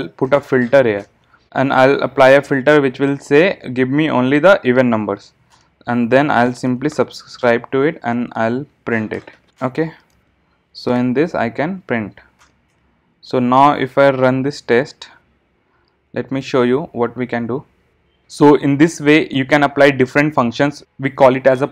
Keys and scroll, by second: 1.0 Return, 7.5 Return, 13.7 alt+super+l.